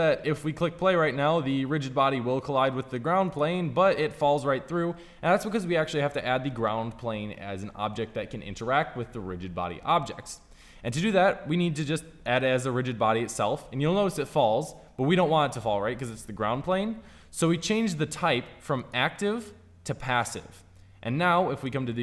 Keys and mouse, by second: 3.2-8.4 drag, 12.3-13.9 drag.